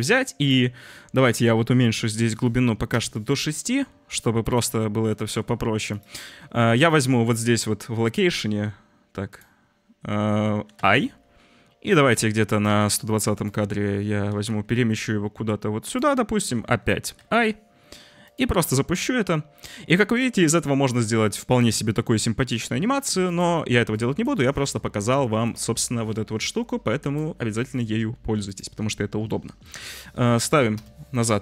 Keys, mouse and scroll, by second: 1.9-3.0 drag, 5.2 g, 8.2 click, 9.2 click, 12.1-13.4 drag, 14.2 g, 17.1 i, 18.2 click, 18.5 space, 21.5 s, 22.4 space, 23.2 click, 23.9 click, 25.5 click, 25.7 Delete, 26.3 click, 27.2 Delete, 29.6-30.8 drag.